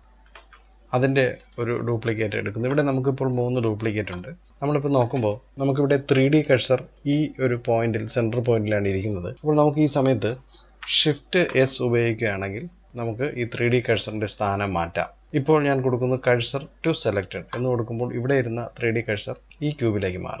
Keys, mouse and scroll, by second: 0.0 shift+d, 1.5-1.9 scroll down 2, 1.9-3.0 shift+middle drag, 3.0-3.3 scroll up 2, 3.3-6.4 shift+middle drag, 7.7-10.1 middle drag, 11.0 shift+s.